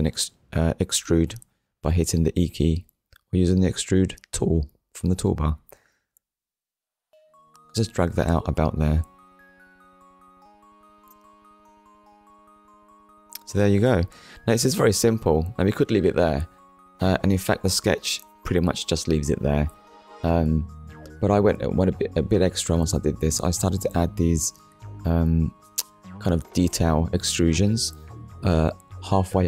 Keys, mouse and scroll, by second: 0.5 KP_1, 1.4 scroll up 1, 4.1 click, 5.4 click, 9.8 click, 10.8 click, 11.5 Tab, 12.3 click, 12.7 scroll down 1, 13.2 middle click, 17.5 click, 18.8 middle click, 22.5 KP_1, 23.3-24.3 scroll up 3, 24.8 scroll down 1, 25.4 scroll down 1, 25.8 shift+middle click, 27.9 scroll down 1, 28.5 middle click, 29.3 shift+middle click.